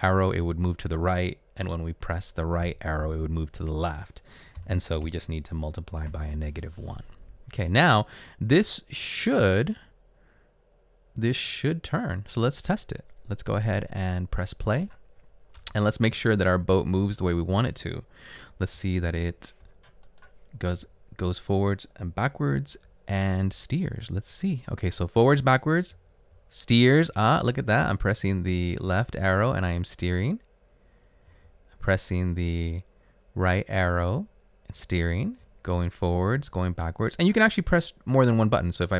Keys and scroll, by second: 4.7 typing, 6.1 typing, 20.7 Right, 22.6 Right, 22.9 Up, 23.8 Right, 25.0 Up, 25.9 Left, 28.1 Left, 30.1 Left, 32.1 Right, 34.2 Right, 35.4 Up, 36.1 Up, 36.9 Down.